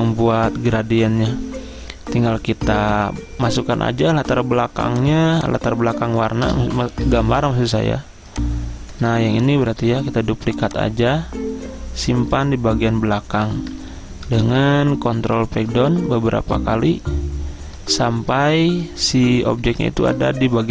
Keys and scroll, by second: 7.0 ctrl+z, 13.9 Return, 14.4 ctrl+Page_Down, 14.5 ctrl+Page_Down, 14.7 ctrl+Page_Down, 14.8 ctrl+Page_Down, 15.3 ctrl+Page_Down, 15.5 ctrl+Page_Down, 19.5 ctrl+Page_Up, 19.9 ctrl+Page_Up, 20.3 ctrl+Page_Up.